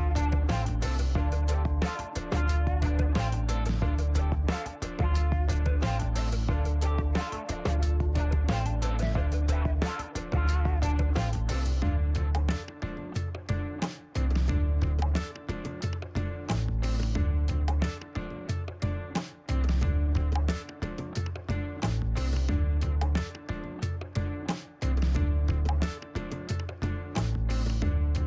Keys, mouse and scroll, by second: 1.2-2.8 drag, 3.5 click, 4.8 click, 6.3 click, 7.7 middle click, 8.3 scroll down 1, 8.6 middle click, 12.8 click, 14.2 click, 16.8 click, 18.0 click, 19.2 click, 19.7 right click, 21.2 click, 24.2 click, 25.4 KP_1, 25.5 KP_8, 25.6 KP_0, 25.9 KP_Enter, 27.4-28.2 drag.